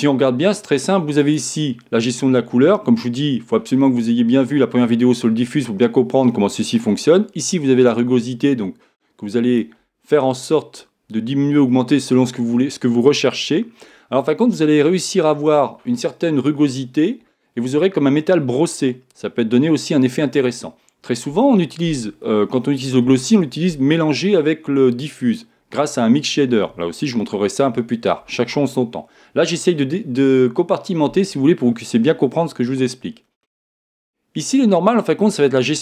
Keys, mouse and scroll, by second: 1.2-3.1 drag, 7.9-35.8 drag.